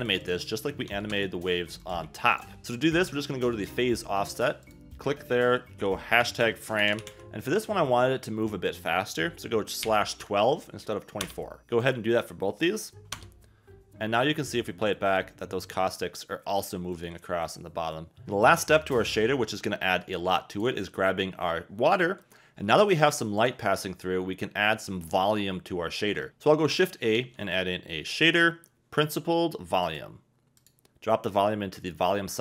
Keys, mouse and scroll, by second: 0.0-1.1 drag, 1.8 click, 8.5-11.2 drag, 11.8 click, 12.7 click, 14.8 space, 18.3 a, 20.5 click, 23.4 click, 24.0 click, 27.1 shift+a, 31.3 click.